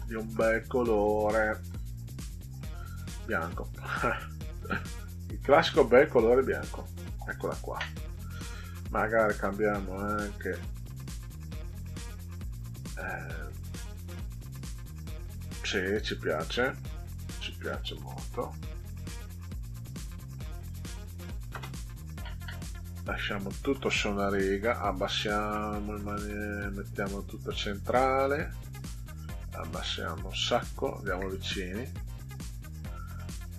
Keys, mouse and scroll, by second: 2.6 click, 4.5 click, 5.6 scroll down 2, 6.3 click, 9.7 click, 14.1 click, 17.2 click, 19.5 BackSpace, 24.5 click, 26.5 click, 29.1-30.2 drag, 30.9 ctrl+scroll up 2, 32.7 click.